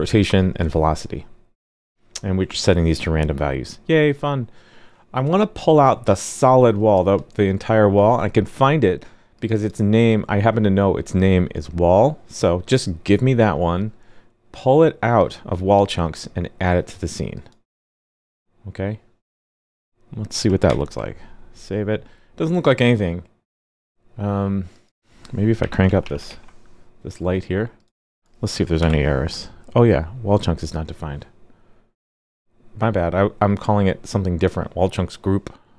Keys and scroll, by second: 20.6 super+s, 26.2 super+s, 28.7 alt+super+j.